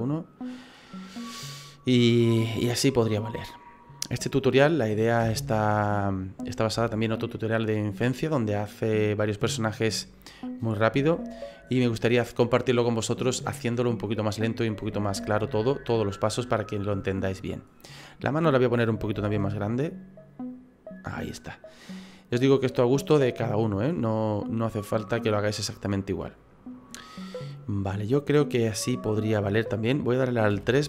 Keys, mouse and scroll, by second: 0.8 middle click, 5.2 KP_1, 6.8 shift+middle click, 11.1 shift+middle click, 15.4 click, 15.7 right click, 18.0 right click, 19.1 s, 22.4 middle click, 30.5 KP_3.